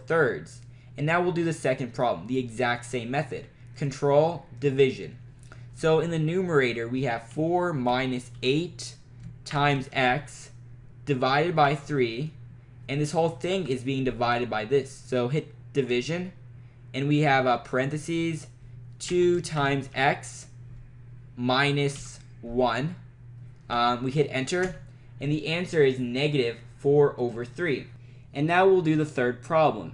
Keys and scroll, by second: 4.6 /, 7.3 4, 7.9 -, 8.4 8, 9.5 *, 9.8 x, 11.7 3, 13.5 Right, 16.0 /, 18.1-20.4 typing, 22.0 -, 23.8 1, 24.7 Return.